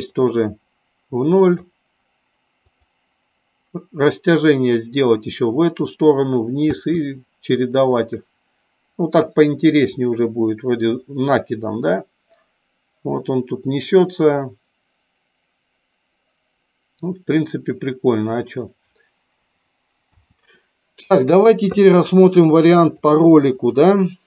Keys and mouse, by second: 0.3-1.6 drag, 2.8 click, 23.0-23.9 drag.